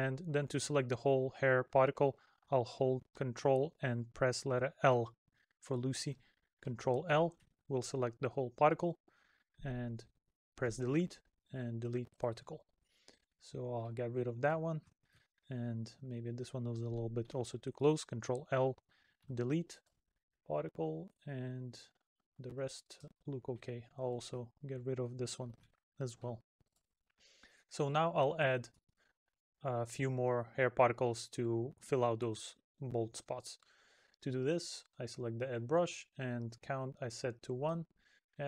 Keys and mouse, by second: 8.5 middle click, 13.1 middle click, 20.5 middle click, 22.2 middle click, 24.5 middle click, 28.1 middle click, 32.1 middle click, 34.2 middle click, 37.9 middle click.